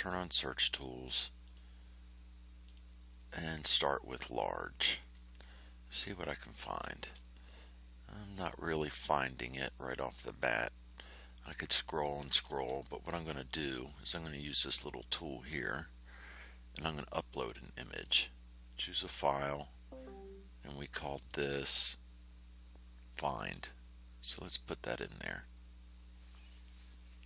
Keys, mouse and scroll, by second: 1.4 click, 2.6 click, 7.1-7.4 ctrl+scroll down 2, 7.9 scroll down 3, 11.4-11.7 scroll up 2, 15.4 click, 16.7 click, 17.9 click, 21.1 click, 23.2 click.